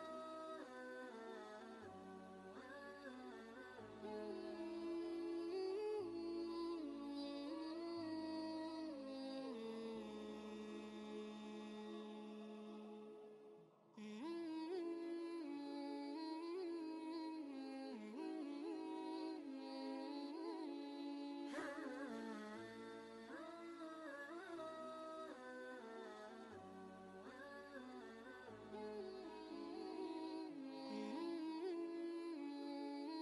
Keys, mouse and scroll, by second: 1.9-5.2 drag, 8.0-13.5 drag, 13.5-15.9 shift+drag, 16.3-18.1 shift+drag, 18.1 Left, 19.1 shift+Left, 22.3 click, 23.7 ctrl+space, 23.9 ctrl+click, 24.3 ctrl+space, 25.0 space, 25.1-31.1 drag, 31.1 shift+Up.